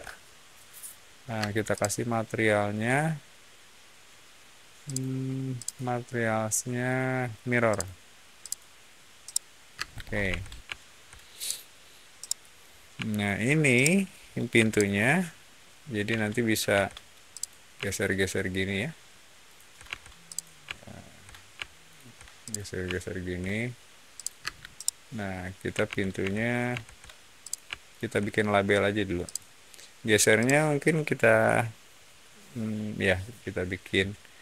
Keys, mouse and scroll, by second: 1.3 space, 1.6 click, 4.8 click, 5.5 click, 7.6 click, 8.3 click, 9.2 middle click, 9.8 scroll down 1, 10.2 Escape, 10.6-11.0 shift+middle drag, 11.3 shift+click, 12.1-12.5 shift+middle drag, 13.0 shift+click, 13.7-14.0 shift+middle drag, 14.5 m, 14.6 click, 16.0 Escape, 17.2 click, 19.3 shift+click, 19.8 shift+Escape, 20.2 click, 21.7 shift+click, 22.3 shift+click, 24.1 shift+click, 24.3 space, 24.7 middle click, 25.8 ctrl+z, 26.1 ctrl+z, 26.6 ctrl+z, 27.3 click, 27.8 shift+click, 29.2 shift+click, 30.3 shift+click.